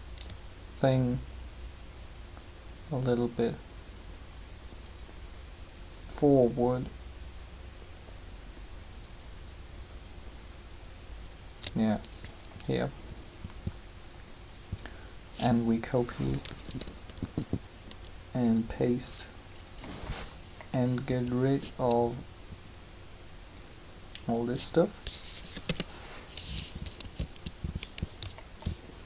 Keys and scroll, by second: 16.5 Up, 21.1 b, 25.2 Delete, 25.4 Return, 27.0 alt+a, 28.6 shift+z.